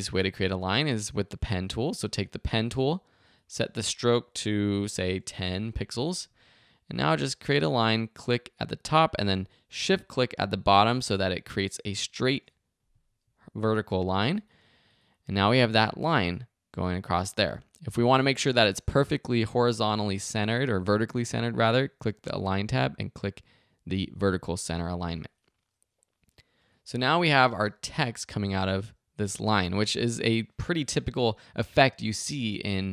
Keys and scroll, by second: 4.5-5.4 typing, 27.4 space.